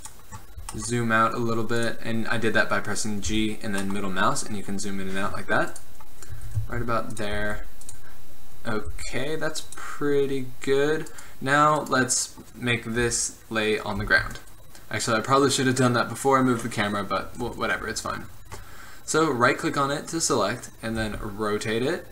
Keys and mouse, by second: 0.8 g, 3.4 g, 6.4 r, 7.5 g, 9.0 g, 13.1 KP_1, 14.1 z, 21.1 r.